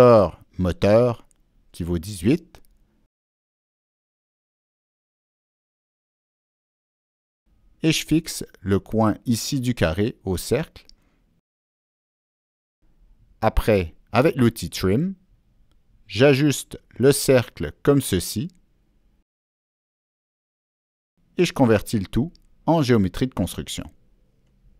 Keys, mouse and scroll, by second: 0.5 right click, 0.8 Escape, 0.8 click, 1.5 click, 2.2 click, 2.3 Escape, 2.3 right click, 3.1 Escape, 5.3 Down, 5.6 Return, 7.3 Down, 7.3 Return, 8.1 Down, 8.1 Return, 8.1 click, 9.4 Escape, 10.5-11.6 drag, 14.0 middle click, 14.0 click, 14.8 right click, 15.6-16.8 drag, 15.8 right click, 17.3-17.9 drag, 17.9 right click, 18.8 Escape, 19.1 Escape, 19.4 click, 20.9 click, 21.1 Escape, 23.4-24.6 ctrl+middle drag.